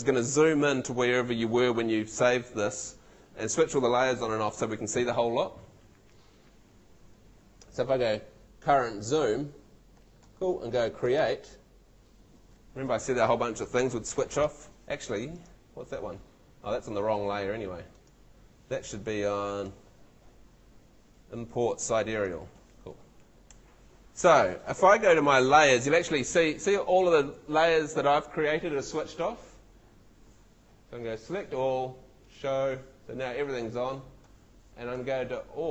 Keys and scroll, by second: 23.5 Escape, 25.2 super+l.